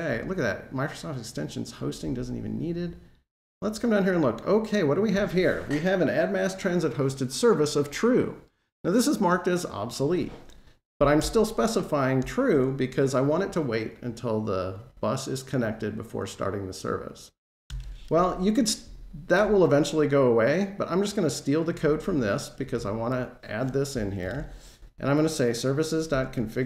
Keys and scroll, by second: 24.2 super+v.